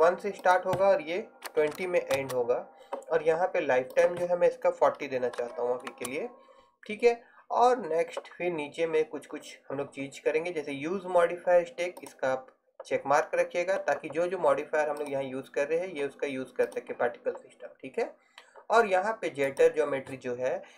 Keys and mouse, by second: 14.0-15.1 middle drag, 15.1-20.7 drag.